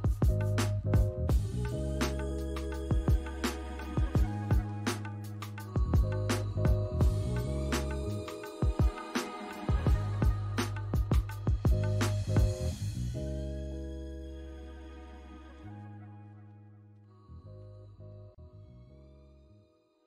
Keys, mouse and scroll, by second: 0.7 double click, 1.7 alt+middle click, 2.1 alt+scroll up 1, 2.4 alt+click, 2.7 alt+right click, 9.8-10.4 scroll up 2, 10.4 alt+middle click, 10.9 alt+scroll up 2, 11.4 alt+click, 13.1 double click, 13.3 right click, 14.8 alt+click.